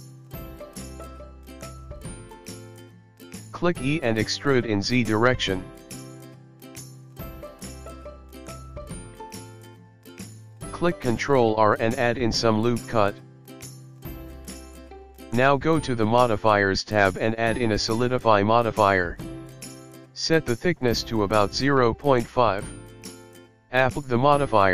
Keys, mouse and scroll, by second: 0.2 shift+middle click, 2.5 e, 6.8 middle click, 8.5 ctrl+r, 12.7 click, 12.9 click, 13.5 click, 14.3 click, 16.7 click, 17.8 click, 19.6 middle click, 21.3 click.